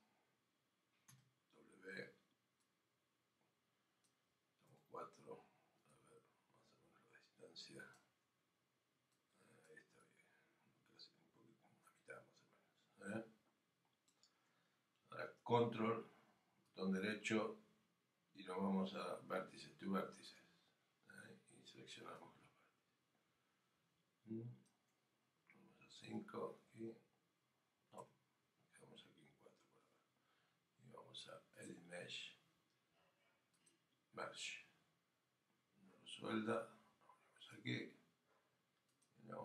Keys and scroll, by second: 26.0 5, 28.0 4.